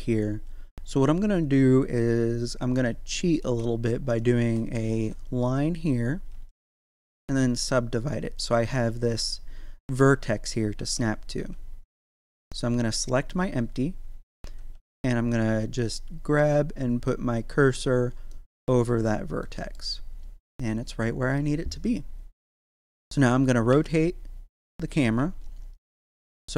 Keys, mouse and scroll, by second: 1.4 click, 2.7 right click, 4.0 shift+right click, 4.9 f, 6.3 w, 7.0 click, 9.0 right click, 10.7 Tab, 11.4 z, 12.4 right click, 14.7 g, 17.6 click, 18.3-24.9 middle drag, 24.9 scroll down 1.